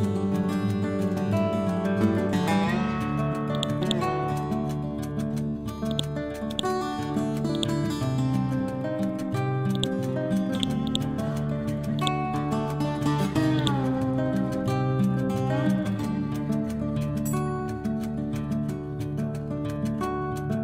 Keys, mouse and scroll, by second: 0.8-1.6 scroll down 1, 3.6 click, 4.5 scroll up 1, 5.2 scroll down 1, 5.4-5.9 scroll up 1, 5.9 click, 7.0 ctrl+z, 7.6 right click, 9.8 click, 10.9 right click, 12.0-20.2 drag.